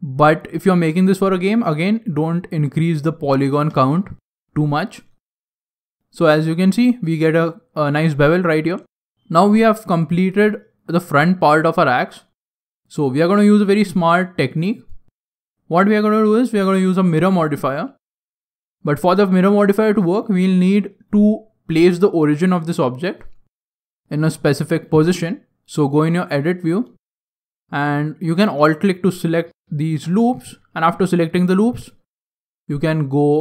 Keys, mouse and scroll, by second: 3.2-3.6 scroll down 4, 3.3-3.6 scroll up 1, 3.6 Tab, 3.6-4.0 scroll down 2, 4.0 middle click, 4.6 middle click, 4.8 scroll up 2, 5.1 middle click, 8.4 scroll down 6, 8.5 scroll up 1, 8.7 middle click, 9.1 middle click, 9.2 middle click, 10.3 middle click, 10.7 shift+middle click, 11.4 middle click, 12.1 middle click, 13.3 middle click, 13.7 shift+middle click, 14.2 middle click, 14.6 middle click, 15.5 middle click, 16.2 middle click, 16.5 scroll down 1, 18.1 scroll down 1, 18.3 middle click, 18.5 Tab, 18.8 scroll down 1, 18.8 scroll up 2, 18.9 scroll down 1, 19.1 middle click, 20.3 scroll down 2, 20.3-22.0 scroll down 5, 20.6 middle click, 23.1 middle click, 23.7 scroll up 1, 23.7 scroll down 1, 23.8 alt+right click, 24.2 alt+right click, 25.3 middle click, 25.3 scroll down 1, 25.3 scroll down 1, 26.4 middle click.